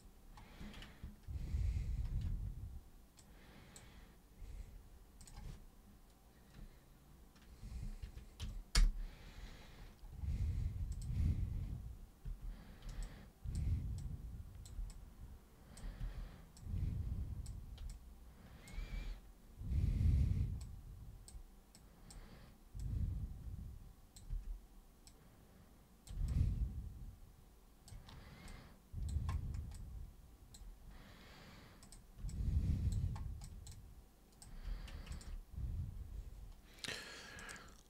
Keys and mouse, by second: 2.0 ctrl+super+d, 3.1-3.7 super+drag, 5.2 super+click, 8.7 super+Return, 10.9 super+click, 12.2 super+e, 13.0 alt+super+click, 14.0-14.6 super+drag, 14.8 alt+super+click, 16.0 super+w, 16.5-17.4 super+drag, 17.9 alt+super+click, 18.9 super+e, 20.6-21.2 super+drag, 21.7 super+click, 22.8-24.1 super+drag, 24.3 super+w, 25.0 super+click, 26.3-27.8 alt+super+drag, 28.5 alt+super+click, 29.7 alt+super+click, 31.8 super+click, 32.2 alt+super+click, 33.4 alt+super+click, 33.7 alt+super+click, 35.1 ctrl+shift+super+click, 37.3 super+click.